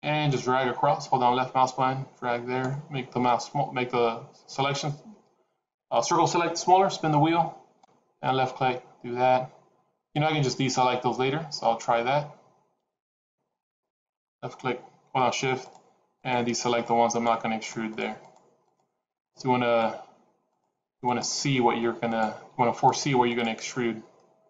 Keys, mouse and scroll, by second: 15.5 shift+click, 16.2 shift+click, 17.1 shift+click, 18.6 shift+click, 19.6 shift+click, 20.7 shift+click, 21.1 shift+click, 22.1 shift+click, 22.9 shift+click, 23.3 shift+click, 24.0 middle click.